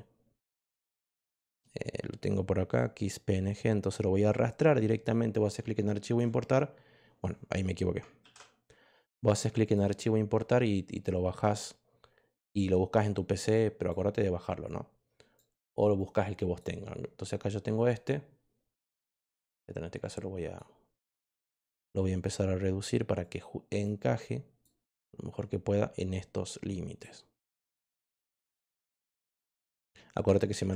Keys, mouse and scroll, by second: 0.5 click, 2.7-6.1 drag, 8.1 ctrl+z, 9.6 click, 11.3-13.8 drag, 14.6 click, 15.9 click, 19.2-20.5 drag, 21.1 click, 23.1 click, 24.1 click, 26.4 click, 27.6 click, 28.4 click.